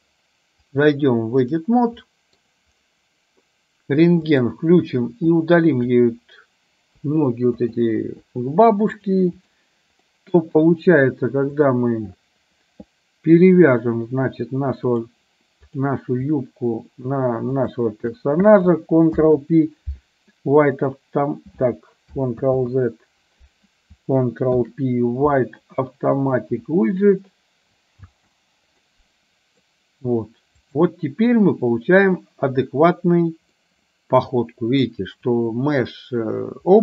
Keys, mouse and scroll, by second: 0.8-1.8 drag, 2.1 middle click, 5.1 click, 7.0 Delete, 9.0 click, 10.1 middle click, 14.9 click, 17.5 shift+click, 19.1 ctrl+p, 22.5 ctrl+z, 24.5 ctrl+p, 28.1 space, 29.0 middle click, 30.8 click, 33.8-35.0 middle drag.